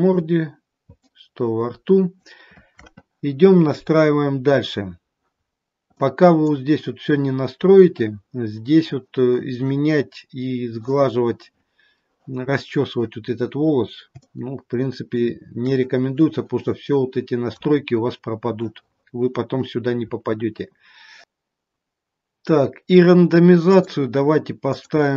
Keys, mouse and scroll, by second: 1.1 middle click, 4.2-5.3 scroll down 2, 5.3-6.1 scroll down 2, 6.1 middle click, 14.1 shift+middle click, 23.6 click.